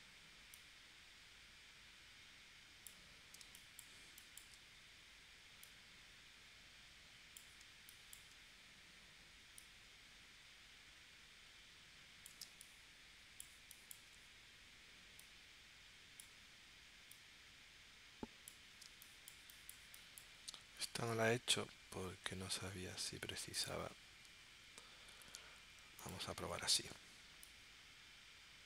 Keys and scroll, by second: 3.4 space, 7.6 space, 12.5 space, 18.9 space, 21.2 p, 26.7 shift+c.